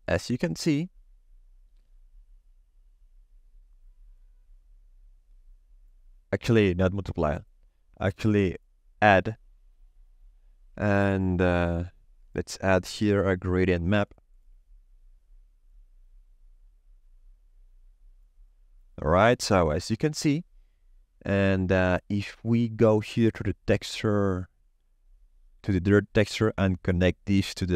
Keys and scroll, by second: 11.7 shift+a, 13.1 g, 13.2 r, 13.4 a, 13.5 d.